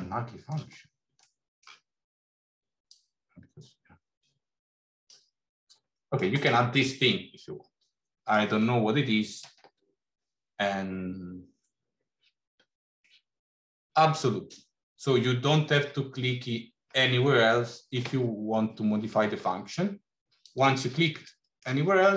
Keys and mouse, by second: 1.1 click, 1.1 right click, 1.5 middle click, 2.7-5.2 drag, 5.9 middle click, 6.8-8.2 middle drag, 20.4 click, 21.3 middle click.